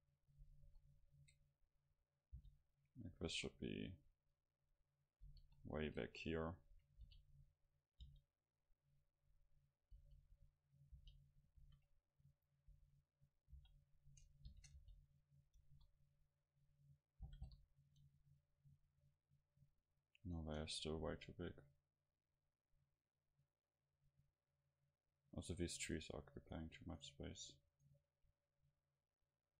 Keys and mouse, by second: 0.1-1.2 middle drag, 0.6 KP_7, 2.4 g, 3.3-5.4 drag, 3.3 KP_0, 5.4 KP_7, 6.5-8.0 middle drag, 7.0 r, 8.0 g, 8.8-10.9 drag, 10.0 r, 11.0 g, 11.5-15.3 drag, 11.6 shift+d, 12.7 s, 13.6 h, 14.5 ctrl+z, 14.8 g, 15.6-17.4 drag, 15.6 KP_0, 17.3 g, 18.6-20.5 drag, 20.3-24.5 right drag, 26.0-29.5 right drag.